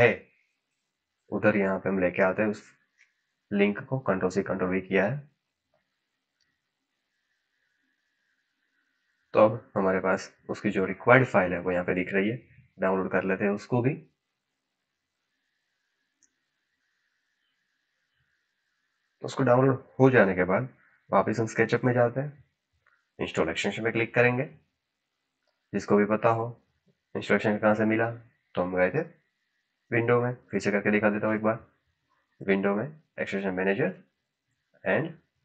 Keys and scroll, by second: 1.7 ctrl+v, 2.1 Return.